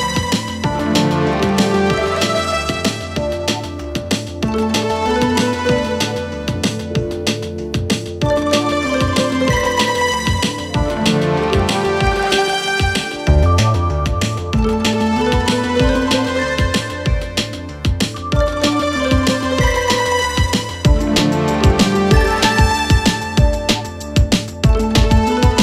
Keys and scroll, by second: 4.3 3, 7.3 ], 9.0 ], 11.0 4, 15.0 3, 15.3 ], 17.9 4, 21.2 2.